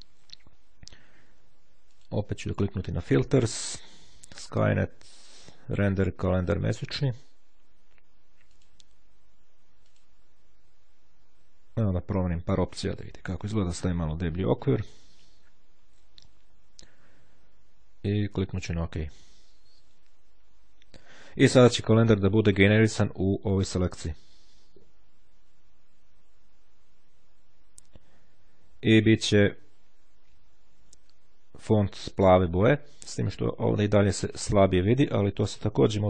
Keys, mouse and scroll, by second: 2.0 click, 6.8 click, 8.7 click, 10.0 click, 13.9 click, 18.9 click.